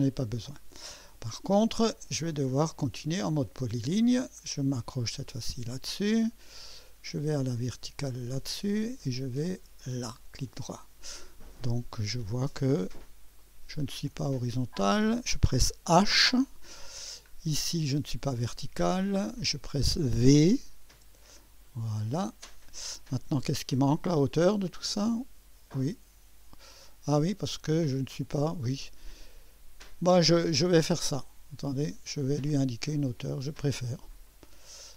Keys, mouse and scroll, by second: 3.3 click, 5.4 click, 8.1 click, 9.8 click, 10.5 right click, 11.2 scroll up 1, 11.7 right click, 12.5 right click, 13.4 right click, 14.1 click, 14.9 click, 16.0 h, 16.1 h, 17.0-17.4 scroll down 1, 17.5 right click, 19.2 click, 20.9 v, 21.7-22.2 scroll up 1, 22.9 scroll down 1, 24.7-28.2 drag, 33.6-34.8 drag.